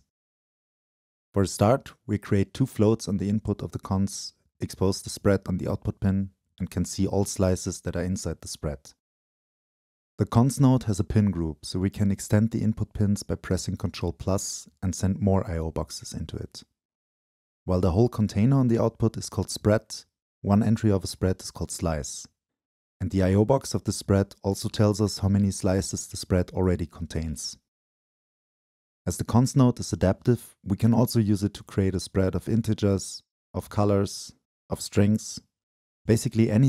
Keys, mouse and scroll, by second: 0.2-2.9 drag, 2.9-3.3 scroll up 1, 3.5 drag, 3.6-5.5 drag, 6.3-7.7 drag, 8.5-9.1 drag, 9.2 click, 10.5-12.2 drag, 14.0-14.7 drag, 15.5-16.7 drag, 19.9 scroll up 1, 22.7 click, 22.7-23.8 scroll up 2, 23.8-25.1 drag, 27.3-28.1 drag, 32.1-32.5 drag, 32.5 Delete, 32.7-33.2 drag, 33.2 Delete, 33.9-34.5 drag.